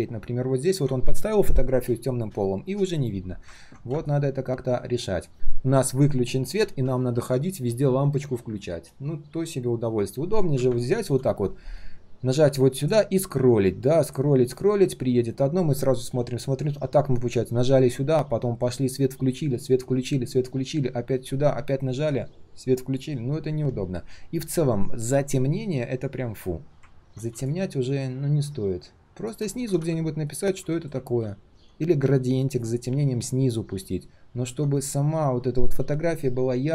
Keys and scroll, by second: 31.0 ctrl+z.